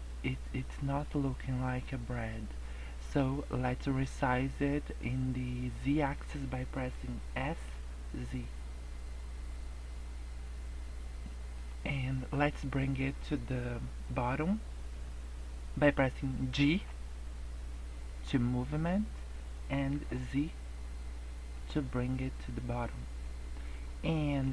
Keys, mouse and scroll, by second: 7.3 s, 16.6 g, 21.8 scroll down 3, 22.0 scroll up 3, 23.2 middle click.